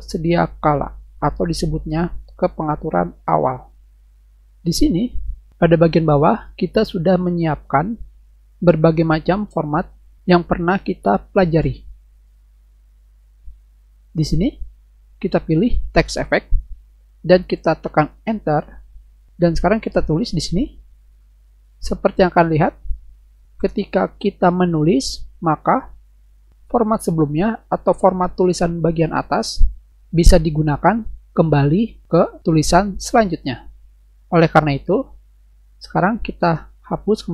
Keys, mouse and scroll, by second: 12.3 middle click, 14.4 click, 18.4 Return, 19.8-22.2 typing, 37.0 click.